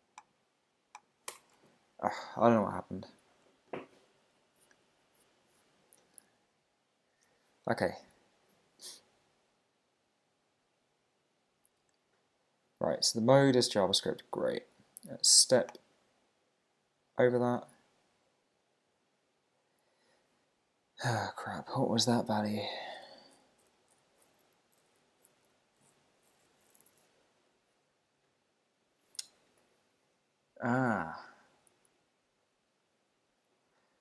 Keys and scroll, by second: 1.3 Return, 1.6 super+`.